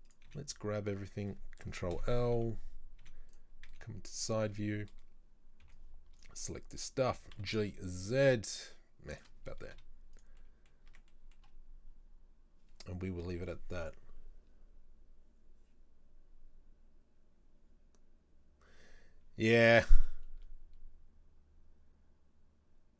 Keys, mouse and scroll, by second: 0.1 click, 0.3 z, 1.1 right click, 2.0 ctrl+l, 2.4 KP_3, 3.1 z, 3.7 z, 4.4-5.7 shift+middle drag, 5.7 b, 7.1 g, 9.8 z, 10.5 middle click, 10.7 scroll down 1, 11.0 Tab, 11.2 middle drag, 11.4-12.3 scroll down 3, 19.7-22.7 middle drag.